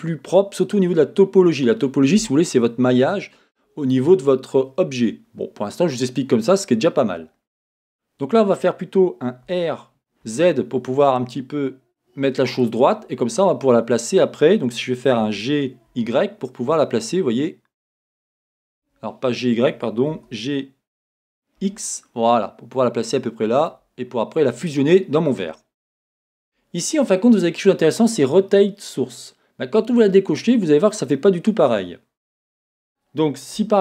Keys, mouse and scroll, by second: 9.5 r, 12.6 click, 15.2 g, 20.1 g, 23.7 click.